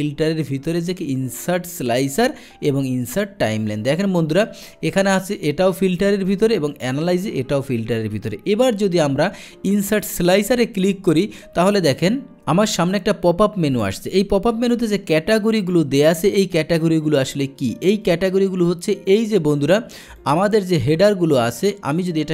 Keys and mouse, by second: 3.9 click, 6.7 click, 10.3 click, 12.0-12.4 drag, 18.7 click, 20.2 click, 21.3 click, 22.0 click.